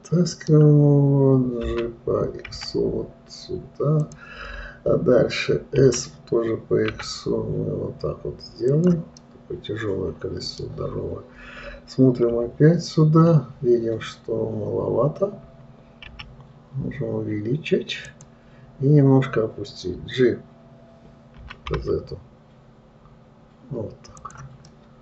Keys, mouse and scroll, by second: 2.1 g, 9.6-12.6 middle drag, 12.7 KP_3, 14.0-15.0 scroll up 2, 16.5 s.